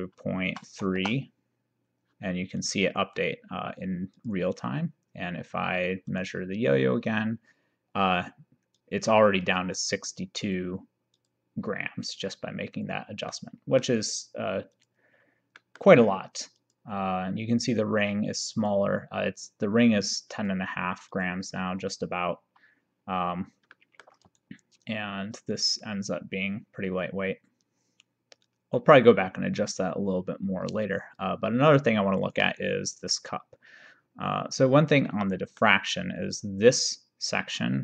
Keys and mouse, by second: 0.5 BackSpace, 2.7 click, 4.2 click, 6.1 click, 8.8 click, 13.4 middle click, 14.8 click, 15.6 middle click, 16.6 click, 18.6 click, 20.4 click, 23.8 middle click, 24.4 shift+right click, 35.2 middle click.